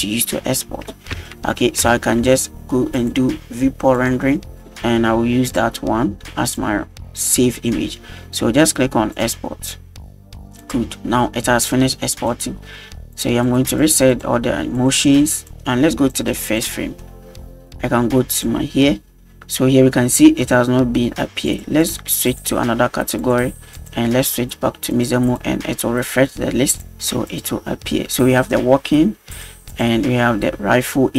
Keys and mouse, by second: 1.3 shift+middle drag, 1.9 shift+middle drag, 3.0-4.6 drag, 5.5-6.6 drag, 9.1-10.5 drag, 10.6 drag, 12.2 click, 13.1 click, 13.5 click, 13.8 click, 14.1 click, 14.8 click, 16.4 click, 18.3-20.1 drag, 21.5 click, 21.8-22.4 drag, 23.2-23.6 drag, 23.7-25.0 drag, 25.3-26.1 drag, 26.7-27.4 drag, 29.3-29.8 drag.